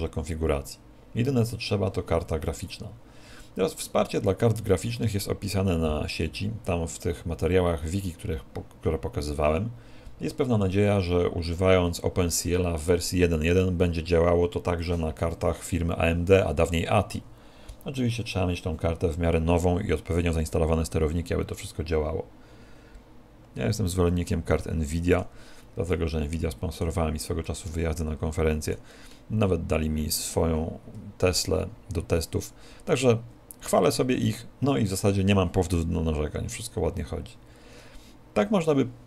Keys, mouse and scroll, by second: 24.3 middle click, 26.1 middle click, 29.9 middle click.